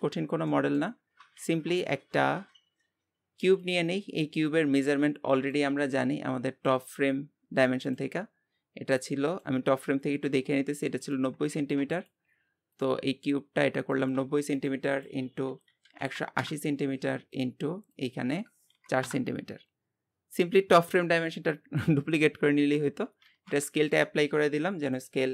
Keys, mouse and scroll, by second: 0.2 scroll down 1, 0.5 middle click, 1.3 shift+a, 4.9-22.5 drag, 22.5-23.2 scroll up 2, 23.2 ctrl+a.